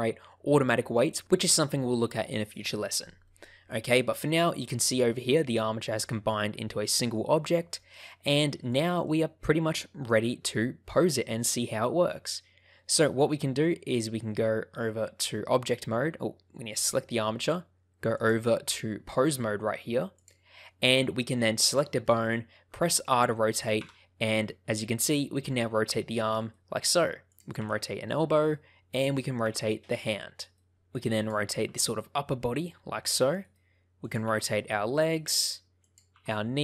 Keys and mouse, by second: 3.2-4.3 middle drag, 7.7 middle click, 8.6 click, 9.0-12.3 middle drag, 12.7 middle click, 18.2-20.2 drag, 21.5 click, 22.0 middle click, 22.7 middle click, 23.7 r, 26.3 right click, 27.2 click, 27.5 r, 28.3 right click, 29.0 click, 29.4 r, 30.4 right click, 31.1 click, 31.6 r, 33.4 right click, 34.2 r, 35.1 right click, 36.1 r.